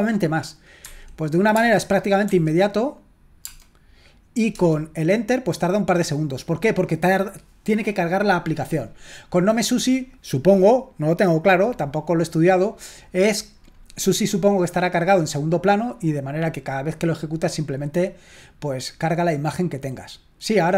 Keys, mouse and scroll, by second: 0.8 Escape, 1.6 space, 2.2 Escape, 3.5 space, 4.7 Return.